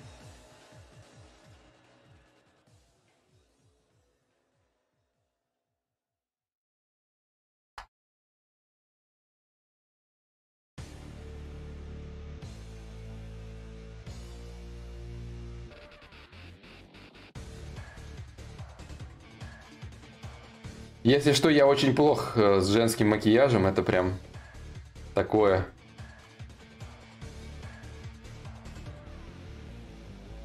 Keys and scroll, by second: 7.3 ctrl+s.